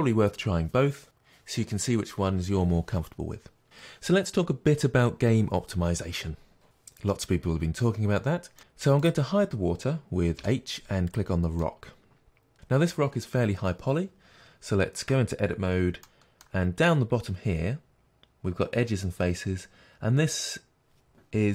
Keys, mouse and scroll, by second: 3.8-8.0 scroll down 1, 8.0 scroll down 1, 8.6 scroll down 1, 9.0 click, 10.3 h, 11.0 click, 11.6-21.5 middle drag, 15.0 Tab.